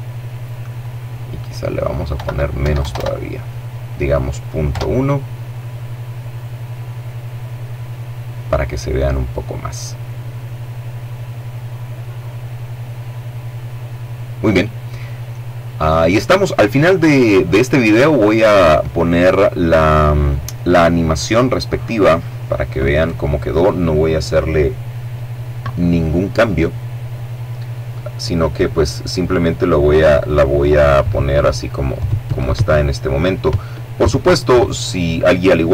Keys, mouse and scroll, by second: 0.7 KP_Decimal, 1.2 KP_1, 1.4 KP_0, 1.5 KP_Enter, 3.3 F12.